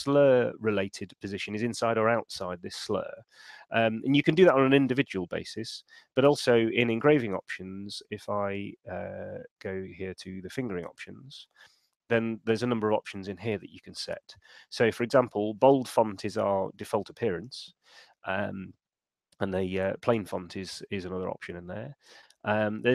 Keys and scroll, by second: 3.5 super+2, 6.5 shift+super+e.